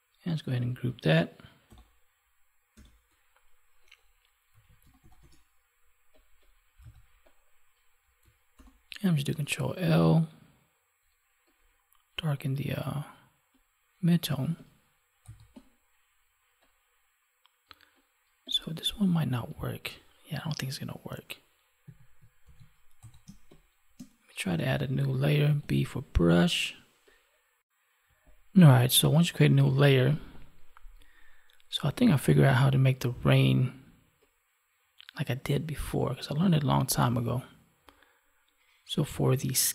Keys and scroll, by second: 1.6 ctrl+h, 8.5 ctrl+l, 21.8 Delete, 22.4 ctrl+s, 23.1 space.